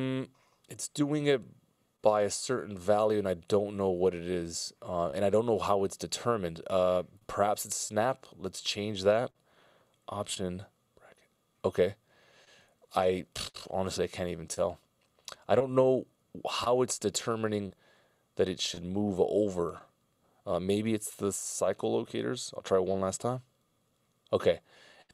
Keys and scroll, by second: 0.1 super+z, 1.3 super+z, 10.8 alt+[, 11.7 alt+], 13.0 super+z, 14.4 super+z, 21.4 c.